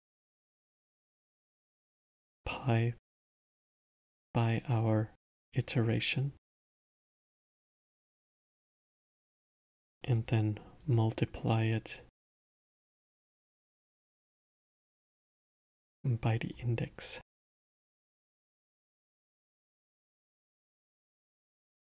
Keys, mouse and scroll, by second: 1.5 drag, 3.9 drag, 7.0 click, 8.1 click, 9.2 shift+d, 10.8 click, 12.2-14.2 drag, 16.5 click, 18.4 click, 19.8-21.8 middle drag.